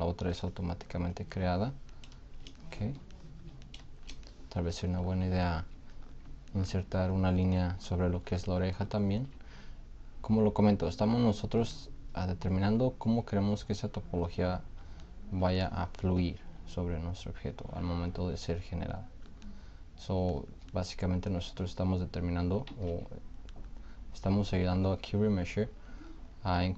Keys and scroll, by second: 22.9 ctrl+z.